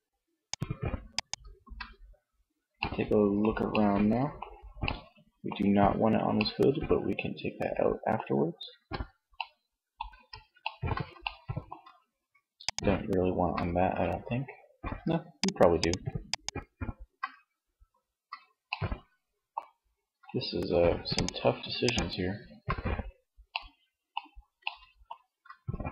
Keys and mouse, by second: 0.9 z, 7.9 z, 9.0 z, 11.8-13.6 middle drag, 14.1 shift+middle click, 18.1 middle click, 20.2-22.5 drag.